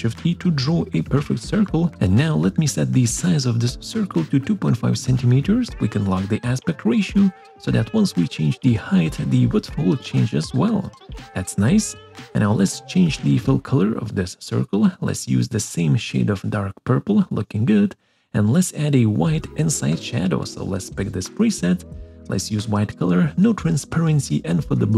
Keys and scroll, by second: 9.0 Return.